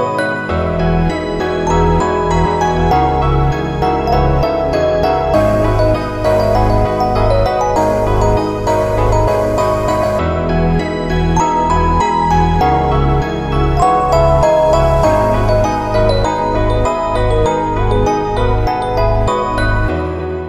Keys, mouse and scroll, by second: 0.9 alt+click, 2.1 middle click, 2.8 shift+middle click, 3.6 alt+shift+click, 3.9 middle click, 4.1-4.8 scroll down 5, 4.6 scroll up 3, 4.9 middle click, 5.6 scroll up 2, 5.9 middle click, 6.2 Tab, 6.9 alt+shift+click, 7.2 middle click, 7.7 right click, 9.2 a, 9.7 u, 9.8 u, 10.6 shift+middle click, 11.0 Tab, 11.3 scroll down 4, 11.5 middle click, 12.1 scroll down 2, 12.4 shift+middle click, 12.8 middle click, 15.2-15.8 scroll down 5, 16.0 shift+middle click, 16.3 middle click, 16.7 ctrl+middle click, 17.3 shift+middle click, 17.7 middle click, 18.4 n, 18.6 shift+middle click, 19.2 click, 20.0 click.